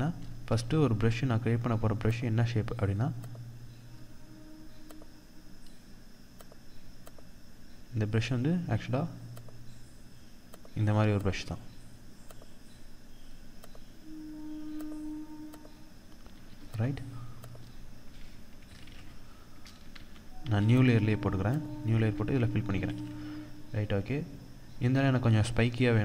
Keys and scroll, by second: 18.2 ctrl+d, 19.4 ctrl+z, 21.2 ctrl+z, 22.2 ctrl+d.